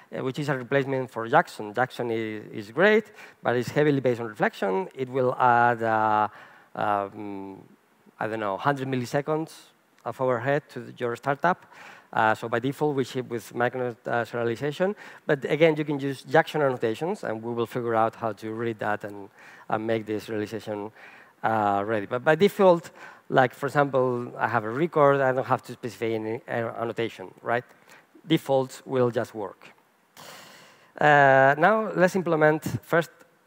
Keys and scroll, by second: 31.5 super+n.